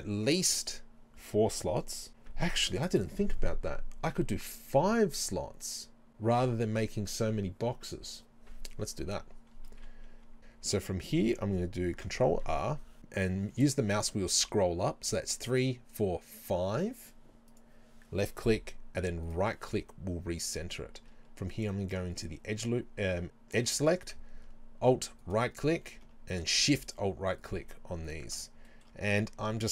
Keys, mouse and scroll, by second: 10.4 ctrl+z, 12.0 ctrl+r, 19.3 right click, 21.6 click, 25.2 alt+right click, 26.9 alt+shift+right click, 27.4 alt+shift+right click, 28.1 alt+shift+right click, 28.7-29.7 shift+middle drag.